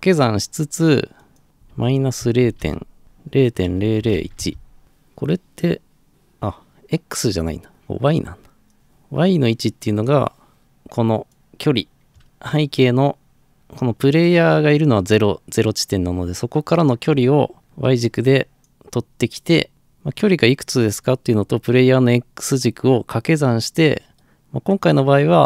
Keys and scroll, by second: 1.7 -, 2.4 Insert, 2.6 Delete, 2.8-4.7 typing.